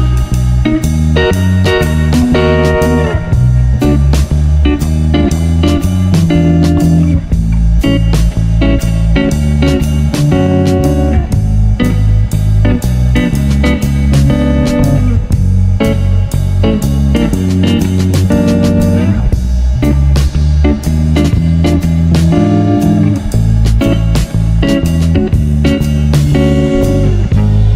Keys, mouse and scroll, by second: 0.1 Tab, 0.3 middle click, 0.6 Tab, 0.8 click, 1.0-2.6 middle drag, 2.6-2.9 scroll down 7, 2.9 middle click, 3.5 Tab, 3.7 Tab, 3.9 click, 4.5 click, 5.1 g, 6.8 ctrl+z, 7.5 click, 8.5 g, 10.3 click, 10.6 click, 12.5-12.9 scroll up 2, 13.0-13.9 scroll down 4, 13.9 click, 14.3 click, 15.2 s, 18.1 g, 23.8 click, 24.5 click, 24.8 click.